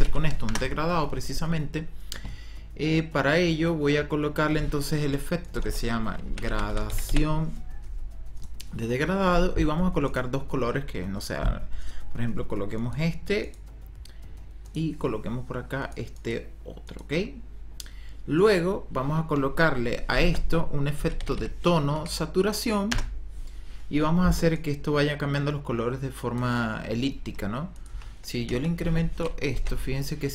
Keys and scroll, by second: 0.0-0.6 typing, 5.7 ctrl+-, 5.9-7.6 typing, 20.3 ctrl+-, 20.7-21.9 typing, 22.8 Return, 27.8 KP_1, 28.4 Return, 29.7 ctrl+z.